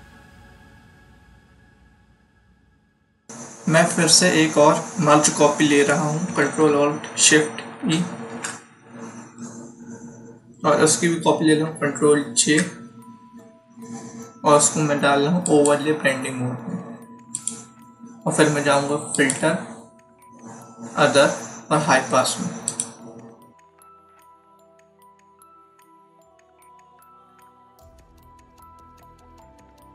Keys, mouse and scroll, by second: 7.7 ctrl+shift+e, 12.3 ctrl+j, 15.4 click, 22.6 click, 29.1 click.